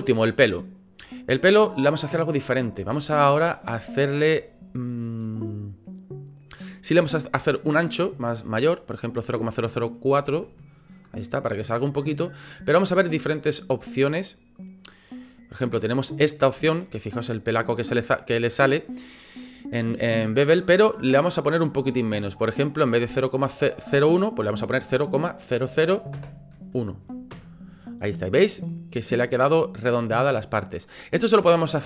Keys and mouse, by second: 0.0 middle click, 1.3 middle click, 1.8 middle click, 2.9 shift+middle click, 3.6 shift+middle click, 7.5-11.0 drag, 11.5 click, 12.1 middle click, 16.7-17.8 middle drag, 22.1-27.9 middle drag, 28.7-29.2 middle drag, 30.8-31.1 middle drag.